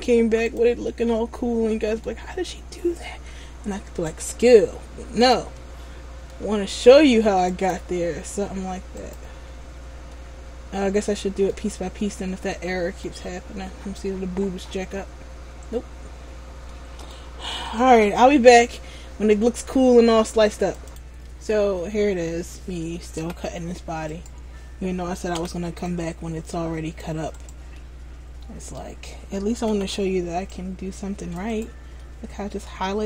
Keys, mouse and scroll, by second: 1.0 middle click, 5.7 middle click, 10.3 middle click, 14.0-15.3 scroll down 8, 15.3-15.6 scroll up 3, 16.8 middle click, 16.8 scroll up 6, 21.0 p, 24.4 right click, 25.5 c, 27.9 middle click, 29.8 c, 31.8 right click, 32.2 middle click.